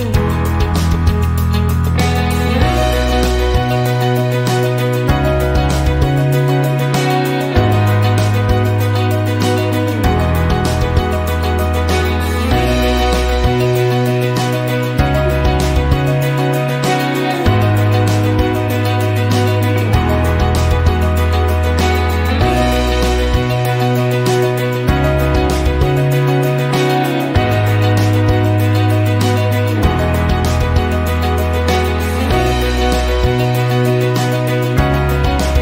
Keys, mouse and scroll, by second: 0.0-1.0 typing, 2.3 click, 4.4 click, 5.7-8.1 typing, 9.7 click, 10.3 click, 11.2-14.1 typing, 15.7 click, 16.0 click, 16.9 shift+a, 18.1 space, 18.6 KP_0, 19.2 KP_1, 22.1 click, 22.7 click, 24.0 KP_0, 24.5 KP_1, 30.4 click, 31.0 click, 31.9 KP_1, 32.1 KP_5, 33.9 click.